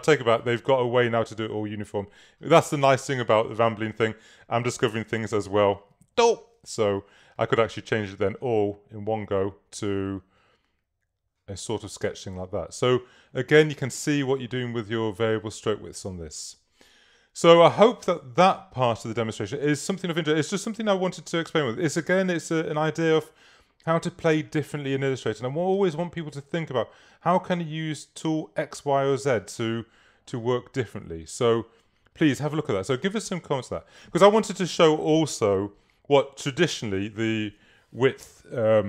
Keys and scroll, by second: 5.3 super+-.